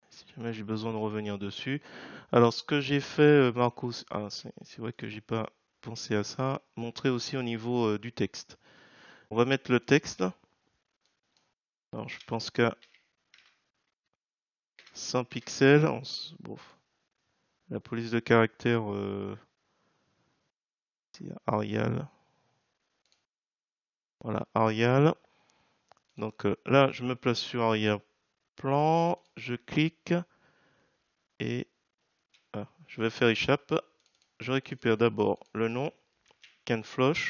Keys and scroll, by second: 32.2 Escape, 36.3 ctrl+c.